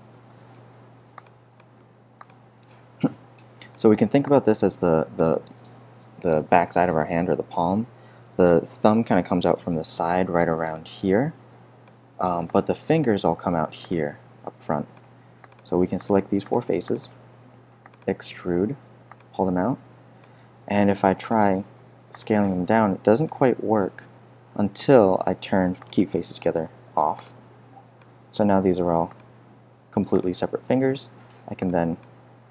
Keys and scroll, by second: 0.1 4, 0.2 Return, 0.8 super+Return, 26.4 0, 26.5 Return, 31.1 super+g.